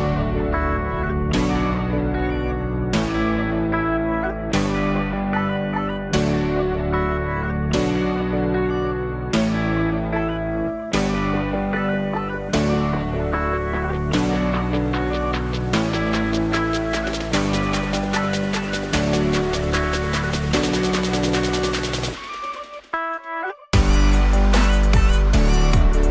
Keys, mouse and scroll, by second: 0.7-2.2 alt+right drag, 2.2 n, 4.7-7.2 drag, 7.3 click, 8.0-10.5 drag, 11.1 click, 12.8-15.4 drag, 20.4-21.1 alt+drag, 21.1-22.4 scroll up 4, 22.4 click, 24.4 h, 25.0 click, 25.1 h, 25.7 click, 25.8 h.